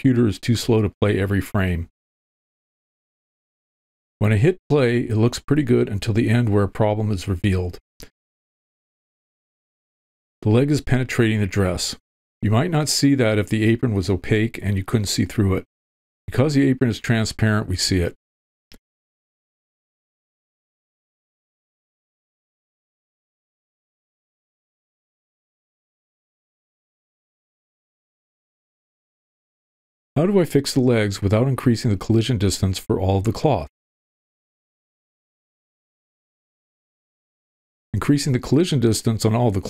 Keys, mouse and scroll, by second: 4.1 click, 18.8 space, 19.1 click, 20.9 click, 27.3-32.6 drag, 32.8 middle click, 34.0 middle click, 35.8 middle click.